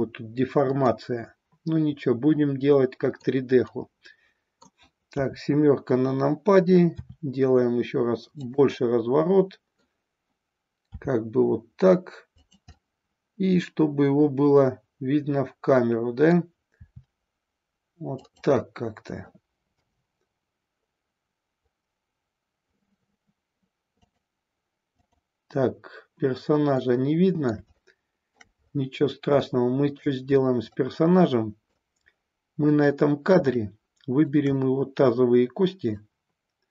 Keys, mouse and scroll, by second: 0.8-3.2 middle drag, 3.6-4.8 middle drag, 5.1 KP_7, 7.0 r, 8.9-10.0 middle drag, 10.9 r, 12.8-16.2 middle drag, 16.8 r, 18.2 click, 18.5-19.3 middle drag, 19.6 KP_0, 23.9 click, 24.9 click, 26.9-28.4 middle drag, 29.4-30.1 shift+middle drag, 30.6-31.8 middle drag, 32.8-33.4 middle drag, 33.6-34.3 shift+middle drag, 34.6-36.0 middle drag.